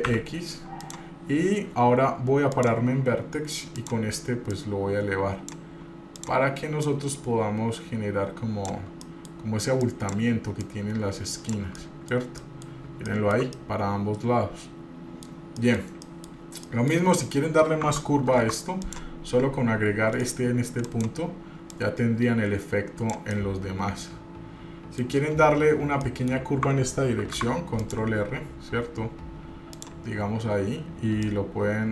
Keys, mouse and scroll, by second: 0.1 e, 2.7 click, 3.9 click, 4.7-5.7 drag, 6.4 click, 7.0-8.9 drag, 9.2 middle click, 10.1 click, 10.8 click, 11.9-12.9 middle drag, 12.6 scroll down 1, 13.3 shift+middle click, 13.7-15.5 middle drag, 15.8 middle click, 15.9 scroll down 1, 16.2 middle click, 16.8 middle click, 18.5 ctrl+r, 21.1 click, 21.9-23.3 drag, 23.5-25.3 middle drag, 26.2 middle click, 27.4 ctrl+r, 31.4-31.9 drag.